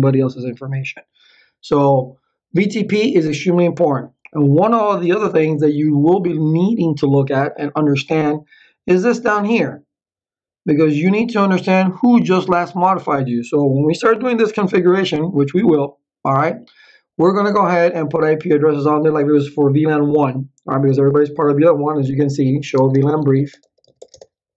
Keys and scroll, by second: 22.3-24.5 typing.